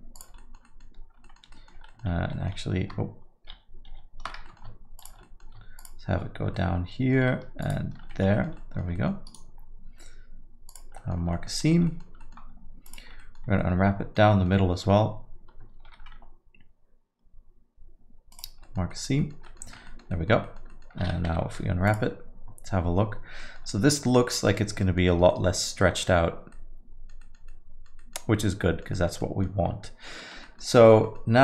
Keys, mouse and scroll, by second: 0.1 ctrl+click, 0.4 alt+middle click, 0.6 middle click, 1.2 alt+middle click, 1.5 middle click, 1.9 middle click, 1.9 alt+middle click, 2.1 ctrl+z, 2.3 ctrl+z, 2.3 ctrl+middle click, 2.4 ctrl+middle click, 3.5 ctrl+z, 4.4 alt+middle click, 5.0 shift+click, 5.2 alt+middle click, 5.8 shift+click, 6.5 alt+middle click, 7.6 ctrl+click, 8.1 alt+middle click, 8.3 middle click, 8.5 alt+middle click, 8.9 middle click, 9.2 right click, 11.0 middle click, 11.3 scroll down 1, 11.3 alt+middle click, 11.6 middle click, 11.8 alt+middle click, 12.2 middle click, 12.8 alt+click, 13.2 middle click, 13.4 scroll down 1, 13.6 alt+middle click, 14.3 middle click, 15.8 ctrl+e, 18.6 alt+middle click, 18.9 alt+middle click, 19.2 alt+middle click, 19.4 middle click, 19.6 a, 19.8 alt+middle click, 20.2 middle click, 20.4 alt+middle click, 20.7 middle click, 21.2 u, 23.4 middle click, 23.7 alt+middle click, 24.8 middle click, 25.1-25.8 scroll down 2, 25.3 middle click, 25.8-26.4 scroll up 1, 26.5 alt+middle click, 27.2 middle click, 27.5 middle click, 28.1 alt+middle click, 28.6 middle click, 28.9 alt+middle click, 29.2 middle click, 29.9-30.2 scroll down 1, 30.2 Tab, 30.4 middle click, 30.7 middle click.